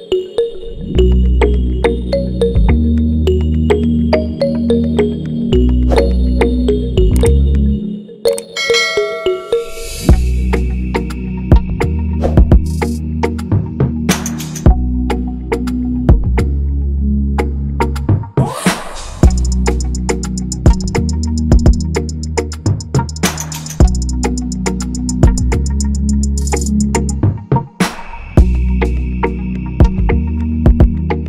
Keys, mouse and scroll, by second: 8.4 Return, 24.4 ctrl+z, 30.2 ctrl+z.